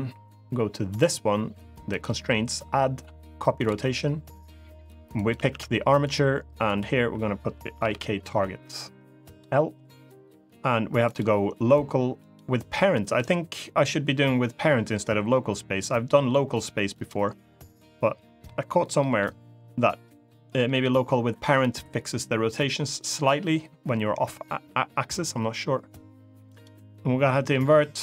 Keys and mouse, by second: 1.6-3.4 drag, 4.9-5.9 drag, 6.4-9.2 drag, 10.8-12.1 drag, 12.8-16.8 drag, 18.2-18.5 middle drag, 18.7 middle drag, 26.2 click, 27.0 middle click, 27.7 click.